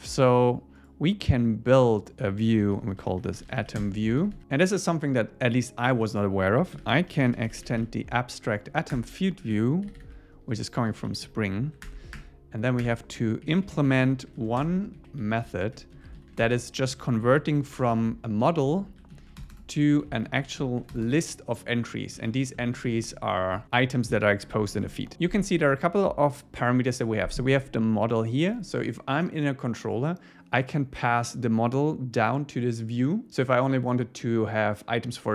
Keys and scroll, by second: 3.8 Return, 4.2 super+1, 5.8 Left, 8.7 Down, 8.9 Return, 10.6 Left, 11.1 Right, 11.8 alt+Return, 13.4 Up, 14.2 Up, 14.4 super+Left, 14.6 Return, 15.0 Down, 15.2 Right, 15.8 super+Right, 16.0 super+Left, 16.9 Down, 17.2 super+Left, 18.4 Down, 18.8 super+Left, 20.0 Down, 20.3 super+Left, 22.2 super+Right, 22.6 Left, 23.1 Left, 23.4 Right, 23.5 Left, 23.6 Down, 24.7 super+Left, 25.1 Up.